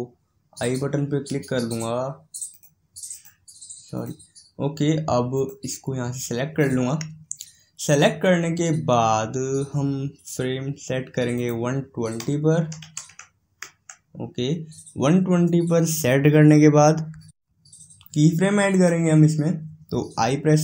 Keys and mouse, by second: 2.4-13.1 drag.